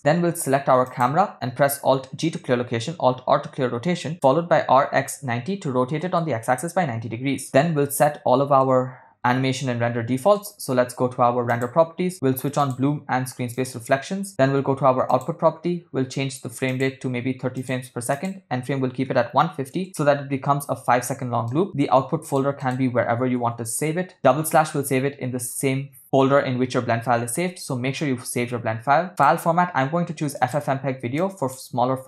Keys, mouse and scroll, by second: 0.9 click, 2.0 alt+g, 3.4 alt+r, 4.6 r, 8.6-9.2 middle drag, 9.6-10.3 shift+middle drag, 11.5 click, 12.6 click, 13.6 click, 15.1 click, 16.7-17.7 drag, 18.1-19.8 drag, 21.5 click, 22.3 click, 22.6-23.9 drag, 23.6 /, 29.1-30.6 drag, 31.2 click.